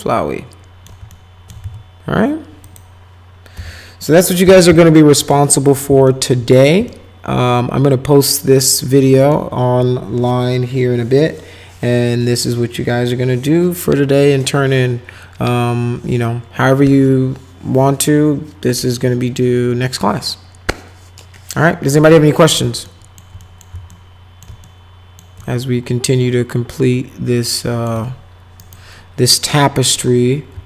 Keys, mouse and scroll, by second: 1.1 alt+shift+right click, 1.6 z, 2.6 click, 3.5 p, 4.4 z, 4.9 alt+middle click, 5.6 middle click, 6.1 alt+middle click, 6.9-9.3 alt+middle drag, 22.8 alt+middle click, 23.4 middle click, 23.9 ctrl+alt+middle click, 24.6 alt+shift+middle click, 25.4-27.9 alt+middle drag, 28.6 scroll down 2, 29.9 click.